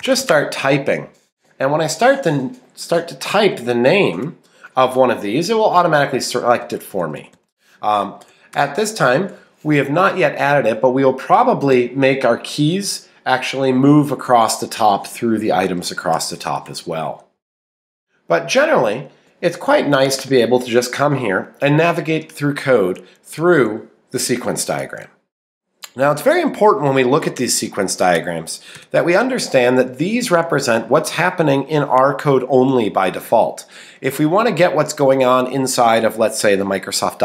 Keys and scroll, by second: 5.7 Left, 10.0 Right, 11.7 Left.